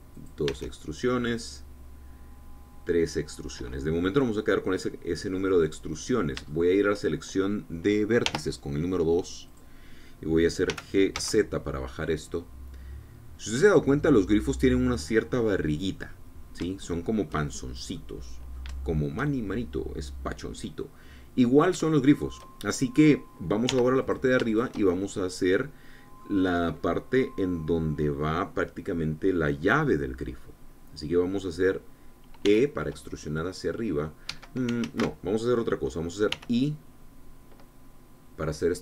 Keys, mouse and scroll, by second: 0.9 click, 1.2 e, 4.1-7.2 drag, 7.2 shift+click, 8.9 2, 10.2-11.4 drag, 11.4 g, 11.8 z, 15.6-17.5 drag, 17.6 shift+click, 18.6-20.4 drag, 21.5-24.0 drag, 24.4 3, 24.7 click, 25.3-27.1 shift+drag, 33.2 e, 35.0 Escape, 35.5 ctrl+z, 37.0 i.